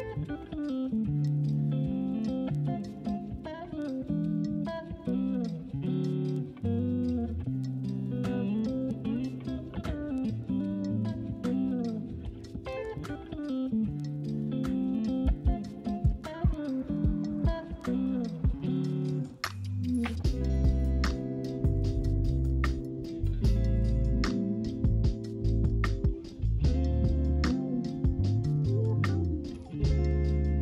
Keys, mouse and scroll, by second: 1.1 middle click, 2.0 Tab, 2.3-4.6 middle drag, 4.6 click, 5.3 middle click, 6.2 click, 6.6-7.7 middle drag, 7.7 Delete, 11.2 click, 12.6 middle click, 13.0 alt+click, 13.3 g, 17.2 right click, 17.6-19.3 middle drag, 19.3 alt+click, 19.8 g, 23.4 z, 23.4 z, 23.7 Tab, 24.1 click, 24.7 middle click, 25.5 right click, 26.6 middle click, 27.2 click, 27.7 right click, 28.0 Tab, 28.9 right click, 28.9 middle click.